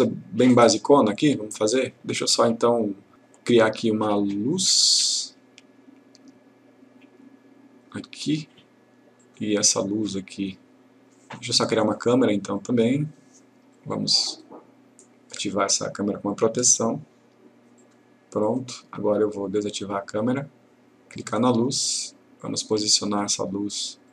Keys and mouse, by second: 5.0-8.2 drag, 16.4 click, 21.3 click.